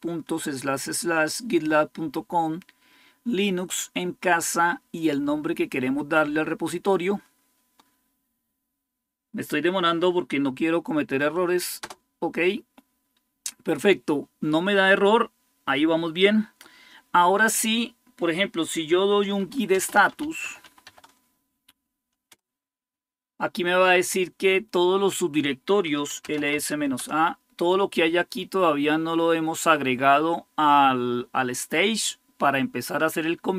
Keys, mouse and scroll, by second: 18.8-21.1 typing, 22.1 Return, 25.1-26.8 typing.